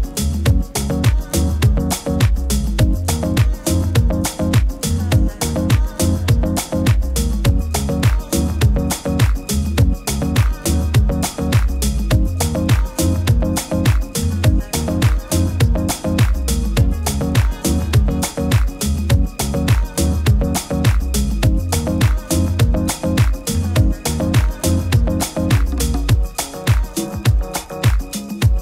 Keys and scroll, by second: 17.0 super+i.